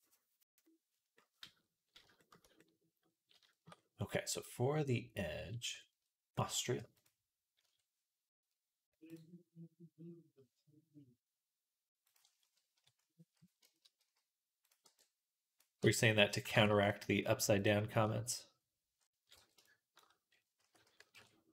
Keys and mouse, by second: 1.9-6.9 shift+middle drag, 6.9-12.6 right drag, 7.5 Tab, 9.0-12.0 drag, 12.6 KP_3, 13.9 z, 14.7 b, 15.6 r, 16.4 ctrl+z, 19.2 b, 20.5 s.